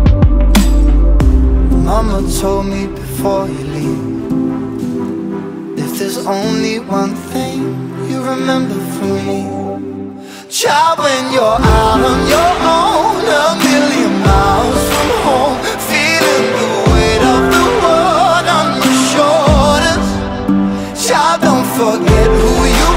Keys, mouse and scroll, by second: 1.1 KP_0, 1.2 KP_0, 1.3 scroll down 1, 4.4 alt+click, 4.7 alt+middle drag, 5.0 alt+right click, 5.2 alt+middle drag, 5.4 alt+right click, 5.5 alt+middle click, 6.0 click, 7.0 r, 8.5-8.8 drag, 9.2 click, 10.4 ctrl+s, 10.6 click, 11.6 shift+d, 12.8 r, 14.3 click, 14.5 click, 15.2 scroll up 3, 15.4 alt+click, 15.6 alt+middle drag, 15.7 alt+right click, 16.3 click, 17.0 n, 17.2 click, 17.3 n, 17.3 n, 17.5 scroll up 1, 17.6 alt+drag, 17.9 alt+middle click, 18.3 drag, 19.2 alt+middle click, 19.4 scroll up 10, 20.0 alt+middle click, 20.8 alt+click, 21.0 alt+middle click, 22.4 click.